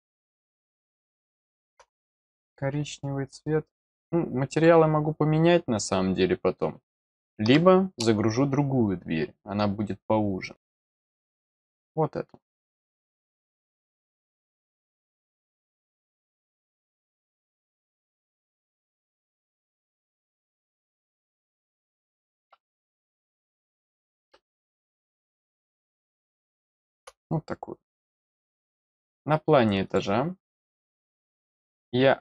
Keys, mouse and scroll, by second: 0.2 click, 0.9 middle click, 3.9 click, 4.5 click, 11.4 click, 12.4 click, 23.3 click, 25.7-26.9 middle drag, 28.6 click, 28.8 click, 29.8 click.